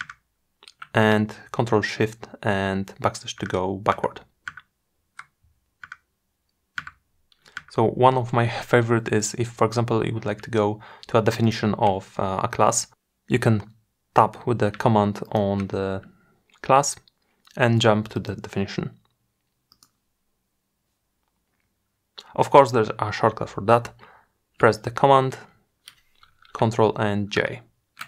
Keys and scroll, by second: 1.5 ctrl+shift+\, 24.9 ctrl+super+j.